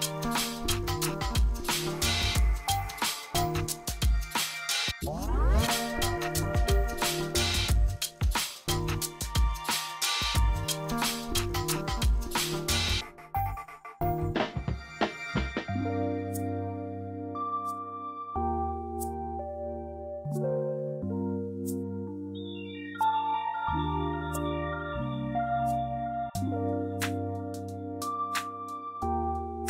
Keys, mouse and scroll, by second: 1.7 ctrl+q, 2.3-4.7 drag, 4.7 ctrl+z, 5.4 space, 6.4 click, 7.6 ctrl+z, 8.1 space, 8.6 scroll up 1, 9.4 ctrl+q, 10.1-18.1 drag, 18.1-20.8 drag, 20.8 space, 21.2 scroll down 1, 22.5 click, 26.2-29.6 drag.